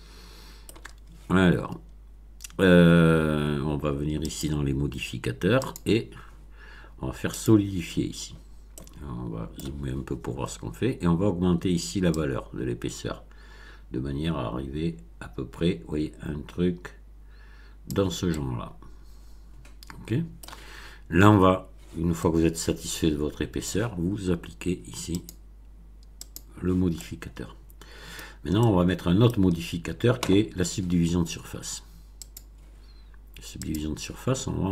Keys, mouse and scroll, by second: 4.2 click, 5.6 click, 7.3 click, 8.3-8.6 scroll up 1, 8.7-9.7 middle drag, 12.1-18.0 drag, 18.2-20.5 middle drag, 22.2-23.8 middle drag, 25.2 click, 26.2 click, 26.9-28.1 middle drag, 28.1 scroll down 1, 28.5-29.4 middle drag, 32.2 click, 33.6 click.